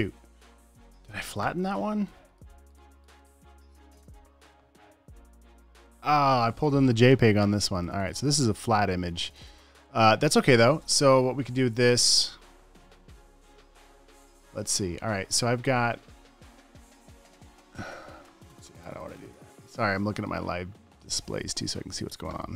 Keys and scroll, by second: 1.1 super+w, 3.2 alt+super+space, 3.7 alt+super+f, 3.9 alt+super+f, 4.5 f.